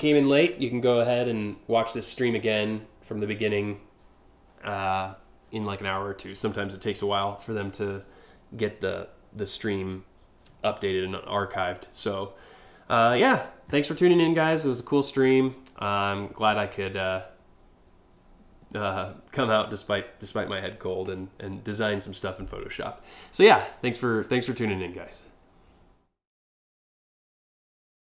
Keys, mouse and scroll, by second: 25.9 click, 27.9 click.